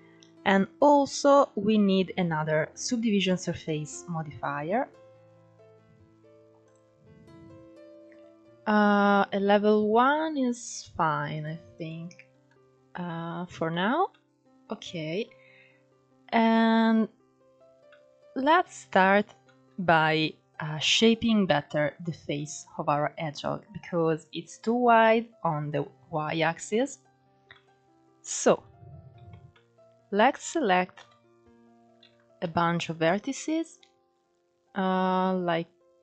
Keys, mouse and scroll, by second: 1.3-2.2 scroll up 2, 3.0-6.1 drag, 9.8-11.4 middle drag, 11.4 click, 12.1-16.8 middle drag, 17.6-18.5 shift+middle drag, 18.5-19.1 scroll up 1, 19.1-25.2 shift+middle drag, 25.2-26.8 scroll down 2, 26.8 scroll up 2, 27.2-28.2 middle drag, 28.2 click, 28.8 Tab, 29.2-30.6 middle drag, 30.6 KP_1, 31.3 scroll up 13, 31.7 alt+z, 32.2 shift+middle click, 32.7 click.